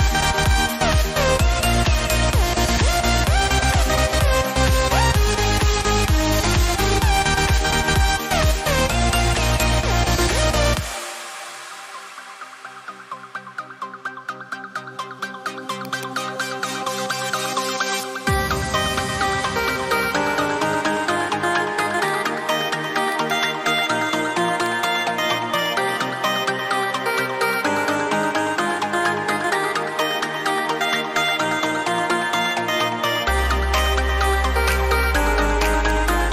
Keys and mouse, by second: 0.5 click, 15.4 x, 15.8 click, 18.0 x, 18.3 click, 22.0 click, 27.7-29.0 typing, 31.6 x, 34.6 right click, 35.9 click.